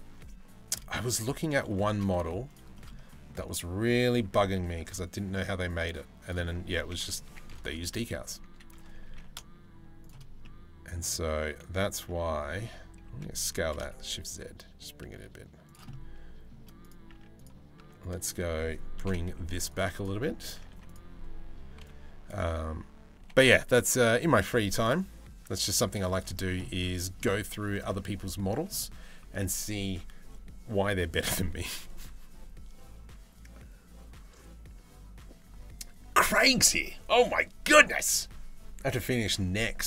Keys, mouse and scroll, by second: 0.7 z, 2.3 middle click, 2.7 shift+middle click, 3.8 e, 8.6 g, 10.0 middle click, 11.4 middle click, 12.7 a, 13.2 s, 15.5 middle click, 16.7 Tab, 17.4 Tab, 18.6 KP_7, 18.8 z, 19.5 click, 20.3 1, 21.4 b, 22.8 g, 25.4 z, 26.2 middle click, 27.1 Tab, 27.5 middle click.